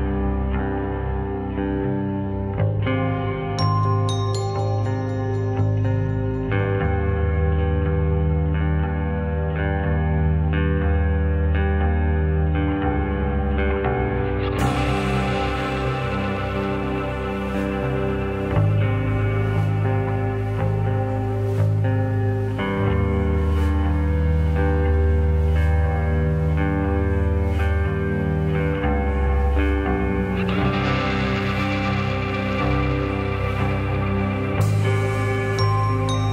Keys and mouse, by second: 3.9 g, 7.6-8.3 drag, 9.7 shift+d, 16.6 s, 18.5-20.1 drag, 22.6 s, 24.4 g, 28.6-31.3 middle drag, 31.5 middle click, 32.8 shift+middle drag, 35.2-35.6 middle drag.